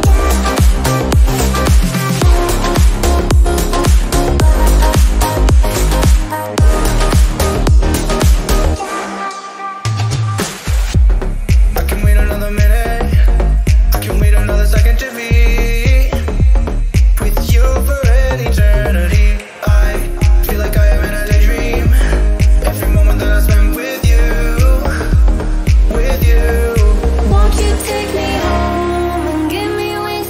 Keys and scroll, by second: 1.6 b, 2.7-4.2 typing, 19.8 ctrl+o.